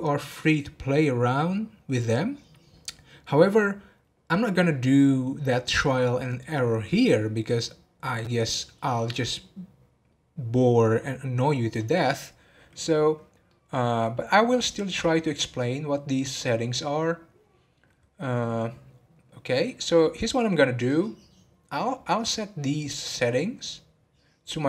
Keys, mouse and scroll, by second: 13.5-16.6 middle drag.